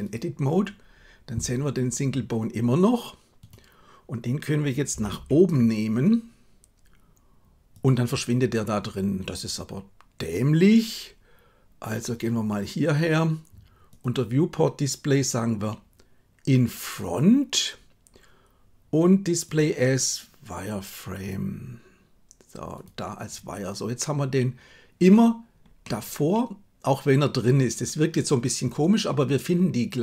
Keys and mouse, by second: 4.9 g, 13.9 click, 16.9 click, 19.5-22.9 drag, 25.7-30.0 middle drag.